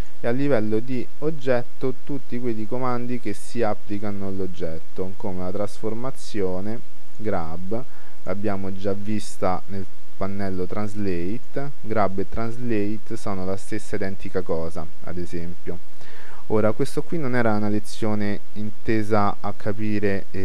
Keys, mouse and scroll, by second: 0.1-1.8 drag, 9.7 t, 11.5-13.3 drag.